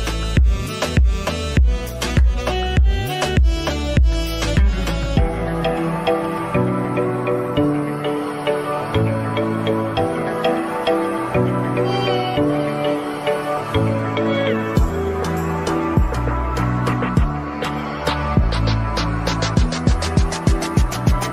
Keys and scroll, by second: 12.7 ctrl+s.